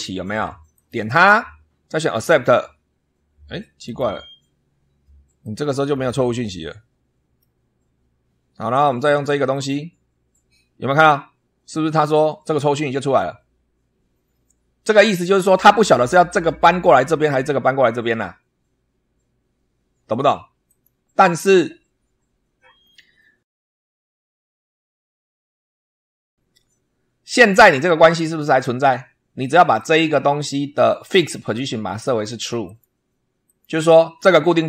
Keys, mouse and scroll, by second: 0.6 click, 1.9 click, 3.8 click, 5.3 click, 5.8 scroll down 2, 6.3-7.5 middle drag, 9.4 click, 15.2 click, 20.6 click, 23.6 click, 29.7 click, 31.4 click, 32.6 click, 33.4 click.